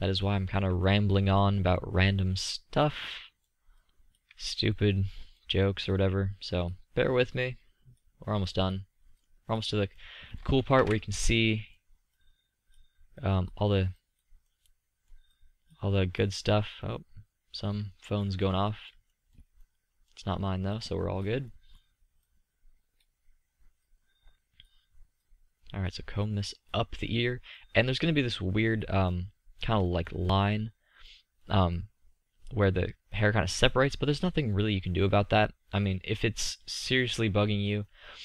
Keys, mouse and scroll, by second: 0.9 click, 1.3 middle click, 3.9-7.3 middle drag, 11.6 ctrl+z, 18.1-18.5 middle drag, 19.2-19.7 middle drag, 19.8 middle click, 20.2 middle drag, 20.5-21.3 middle drag, 21.3-22.1 drag, 22.1 middle click, 22.4-27.6 drag, 27.6 middle click, 27.7 drag, 27.9 middle click, 29.6 middle click, 29.8 middle click, 29.9 click, 30.9-31.7 middle drag, 32.3-33.9 drag, 33.9-38.2 middle drag.